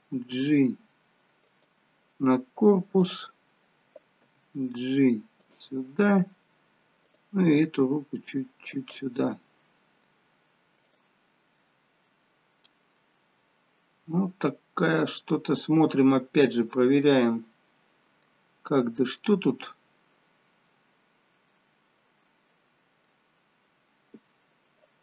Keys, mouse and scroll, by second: 0.3 g, 3.0 click, 4.3 g, 7.1 click, 7.4 g, 10.9 click, 12.6 middle click, 15.9 click, 16.6 middle click, 18.4-19.5 scroll up 3, 18.9 middle click, 23.4-25.0 scroll down 1.